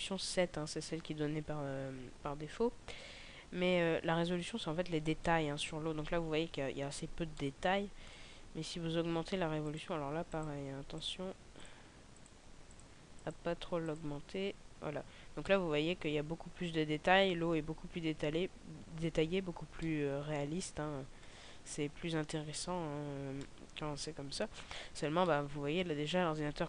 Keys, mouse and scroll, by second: 5.0 middle click, 5.0-5.6 scroll down 1, 5.6 middle click, 6.2 scroll up 1, 7.3 middle click, 7.3 scroll up 4, 9.5 click, 14.3 click, 15.9 middle click, 18.0-19.1 scroll up 3, 19.1-19.9 scroll down 2, 19.9 middle click, 21.9-23.6 scroll down 4, 23.6 middle click, 25.4 middle click.